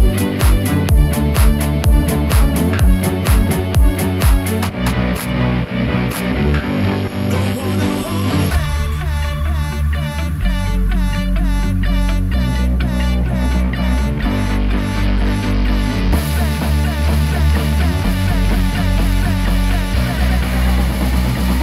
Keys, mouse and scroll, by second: 0.4 click, 1.3 alt+e, 7.4 click, 7.9 Tab, 8.4-9.0 scroll down 2, 9.0-9.4 middle drag, 9.6 scroll down 2, 10.1-10.9 middle drag, 11.1-12.3 scroll down 2, 13.0 click, 14.0-14.3 scroll up 2, 14.8-16.3 middle drag, 18.0 click.